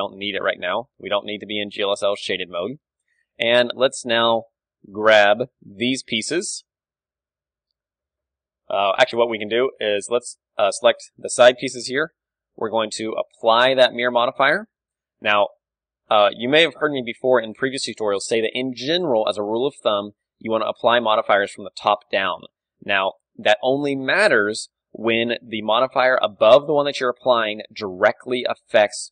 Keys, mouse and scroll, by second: 0.3 z, 0.7-4.8 middle drag, 1.0 z, 4.8 Tab, 5.4 a, 6.4 l, 7.7 l, 8.5 Tab, 10.4 middle click, 10.7 click, 11.2 middle click, 11.6 click, 12.1 n, 14.0-16.0 drag, 16.0 middle click, 16.2 ctrl+z, 16.8 ctrl+w, 23.5-25.1 drag, 24.9-26.7 middle drag, 27.4-28.6 middle drag, 28.6 click.